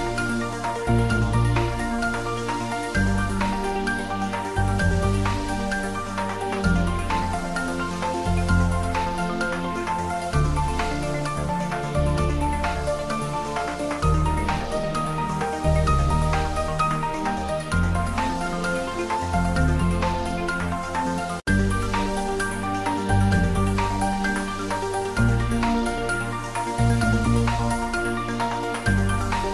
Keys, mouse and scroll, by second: 1.8 Right, 3.0 click, 4.8 click, 5.1 ctrl+shift+z, 5.8 click, 6.1 shift+z, 6.7 ctrl+s, 16.5-17.4 scroll down 1, 24.0-25.3 middle drag, 25.3 click, 25.9 scroll up 1, 26.5-28.8 middle drag.